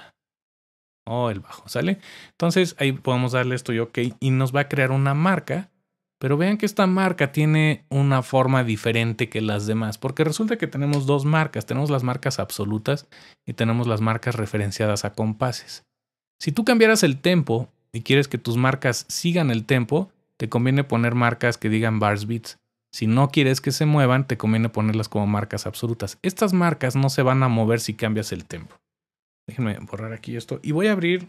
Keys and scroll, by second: 0.0-1.0 typing, 3.8-4.5 typing, 10.9 typing.